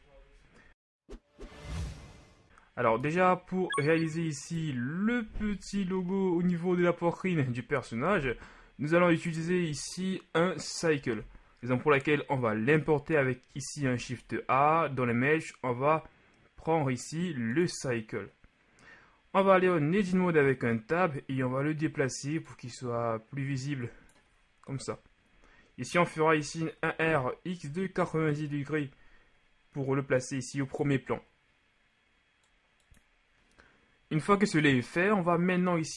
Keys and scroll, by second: 5.4 z, 6.0 shift+z, 14.0 shift+a, 20.3 Tab, 25.0 KP_1, 26.6 r, 27.3 x, 27.9 KP_9, 28.3 KP_0, 28.6 Return.